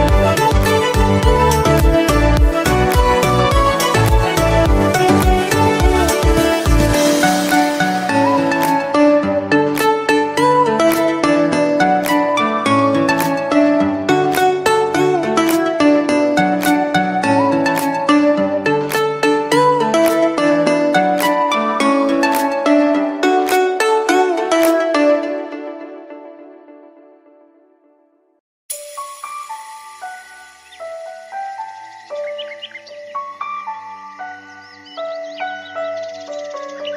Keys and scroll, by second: 4.7 2, 5.1 Return, 6.2 Escape, 15.0 Escape, 16.3 Escape, 27.4 5, 27.9 Return, 29.4 Escape, 32.4 Escape.